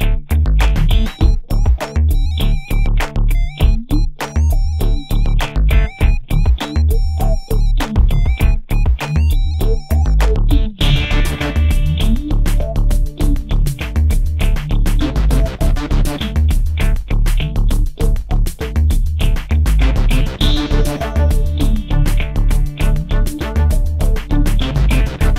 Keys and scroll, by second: 9.0 ctrl+z, 9.8 space, 11.3 p.